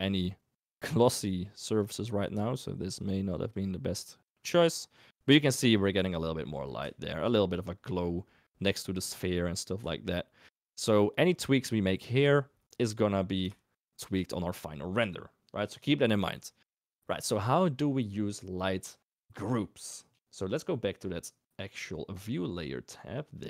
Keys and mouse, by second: 0.7 click, 3.1 click, 7.0 shift+drag, 13.6 shift+middle click.